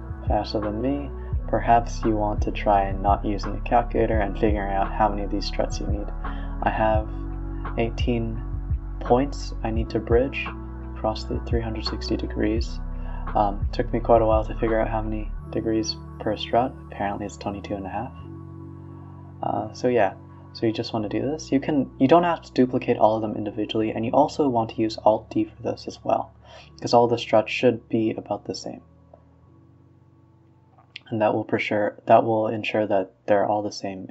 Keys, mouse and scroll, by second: 0.4 ctrl+z, 0.6 r, 3.7 shift+r, 4.2 ctrl+z, 4.5 shift+click, 6.1 alt+d, 6.7 r, 8.5 shift+click, 9.0 shift+click, 9.3-9.7 scroll down 2, 9.7 alt+d, 10.1 r, 11.3 shift+click, 11.6 shift+click, 11.9 b, 12.3 shift+click, 12.7 shift+click, 12.9 shift+click, 13.1 shift+click, 13.8 shift+click, 14.1 shift+click, 14.4 alt+d, 14.6 r, 17.6 a, 17.7 a, 17.9-19.5 middle drag, 19.5 click, 19.8-20.2 middle drag, 20.2 b, 20.6-21.3 middle drag, 21.3 shift+click, 22.5-23.6 scroll down 21, 23.6 click, 24.9-25.3 middle drag, 25.3 b, 25.9-26.6 middle drag, 26.6 shift+click, 27.9 ctrl+p, 29.8 middle click, 30.4 click, 30.7-31.2 scroll down 14, 31.2-31.7 scroll up 13, 31.7-32.4 scroll down 2, 32.4 shift+click.